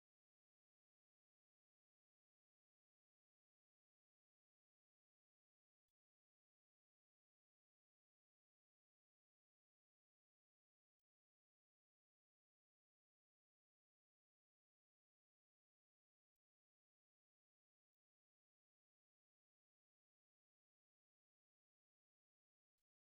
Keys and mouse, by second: 0.1 ctrl+click, 0.6 middle click, 1.8 shift+middle click, 2.3 ctrl+middle click, 2.8 middle click, 6.6 right click, 7.4 ctrl+click, 8.6 ctrl+click, 11.9 ctrl+click, 14.7 ctrl+click, 16.9 middle click, 18.6 right click, 19.5 ctrl+click, 19.9 right click, 20.7 o, 21.2 right click, 22.3 right click.